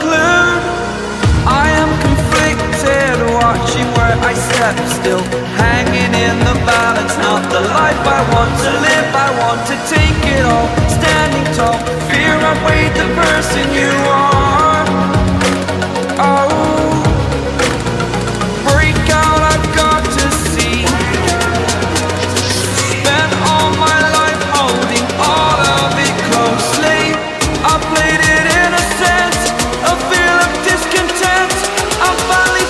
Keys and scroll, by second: 1.4 ctrl+z, 12.7 ctrl+z, 21.9 ctrl+u.